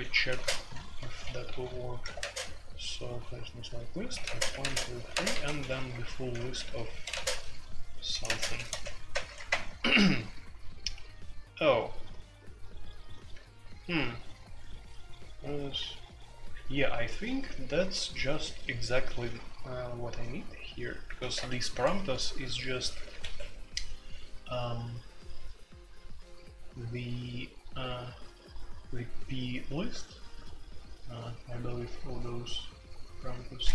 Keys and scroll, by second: 0.0-33.7 typing, 21.2 alt+1, 21.4 Escape, 22.9 alt+1, 23.2 Escape.